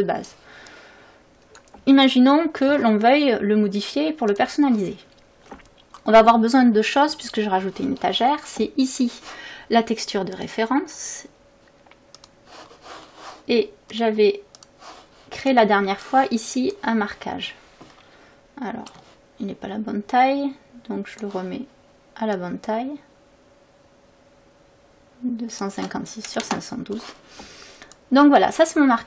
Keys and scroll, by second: 4.3 ctrl+s, 16.8 ctrl+s, 26.4 Return.